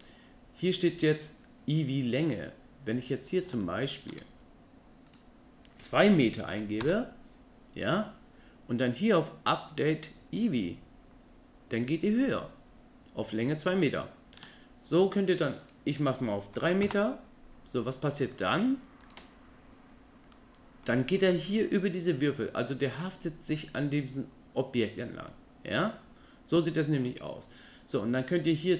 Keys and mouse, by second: 3.6-4.1 shift+middle drag, 5.2-6.8 drag, 10.6-13.6 drag, 13.9-14.4 shift+middle drag, 15.6-16.8 drag, 20.3-20.8 middle drag, 22.7 middle click, 25.3-27.1 middle drag.